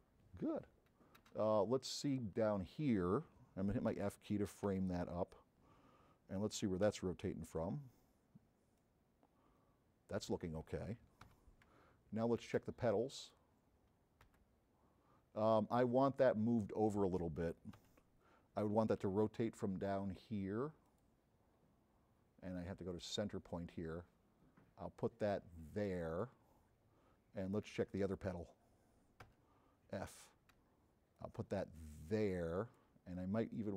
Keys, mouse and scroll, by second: 2.1 click, 4.1 f, 7.1 c, 8.8-10.3 drag, 11.4 z, 13.2 click, 14.6 c, 20.9 click, 22.9-26.4 drag, 28.1 click, 28.1 space, 30.7 v, 31.2-32.9 drag, 33.4-33.7 drag.